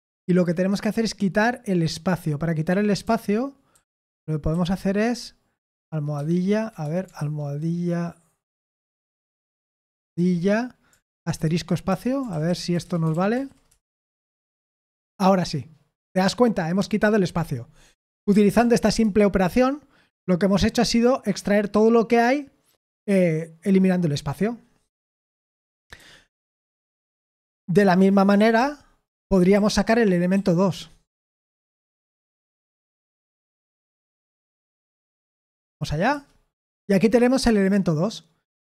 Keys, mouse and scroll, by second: 2.7-4.5 typing, 6.2-7.2 typing, 9.6 #, 11.1-13.2 typing, 11.9 Escape, 13.3 ctrl+p, 13.7 Return, 18.3 ctrl+p, 18.6 ctrl+p, 19.0 Return, 25.2-26.0 typing, 28.0-30.8 typing, 32.7-35.6 typing, 35.7 ctrl+p, 36.1 Return.